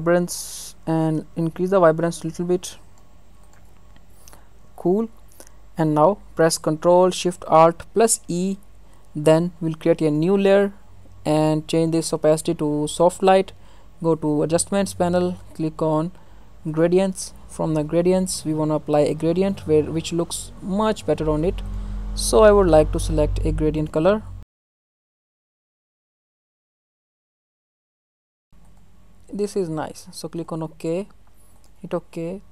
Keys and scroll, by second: 8.0 ctrl+alt+shift+e.